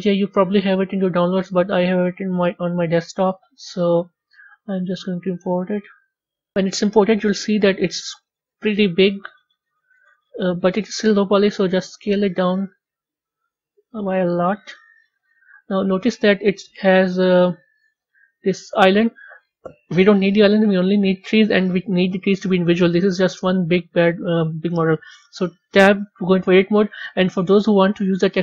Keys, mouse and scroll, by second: 8.0 click, 8.6-11.3 scroll down 24, 11.3 s, 12.7-13.1 scroll up 9, 13.8 s, 15.2-17.2 scroll up 11, 17.8 click, 18.4 click, 19.2 click, 20.0-22.8 middle drag, 22.8 g, 26.2 b, 28.1 middle click.